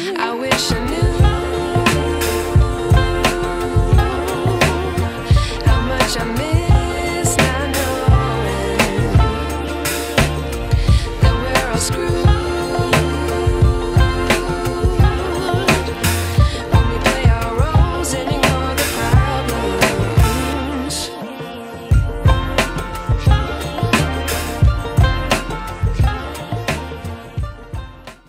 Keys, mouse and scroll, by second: 5.4 click, 8.5 click, 18.7 click.